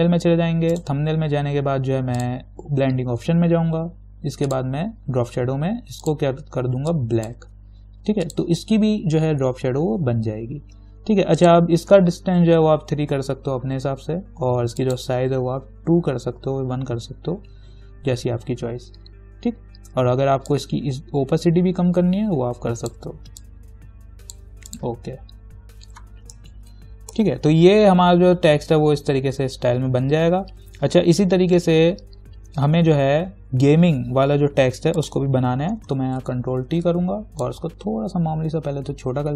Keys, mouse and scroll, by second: 0.9 right click, 2.4 click, 4.7 click, 11.6 click, 12.9 3, 15.0 click, 16.2 2, 20.7-24.9 drag, 26.8 ctrl+-, 35.2 click, 36.4 ctrl+t, 37.7-39.3 alt+drag.